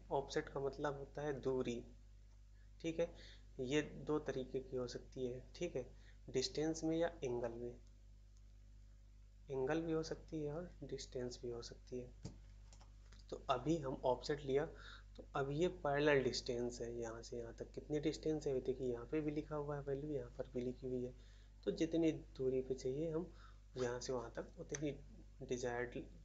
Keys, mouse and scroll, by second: 12.6 shift+a, 24.6 middle click.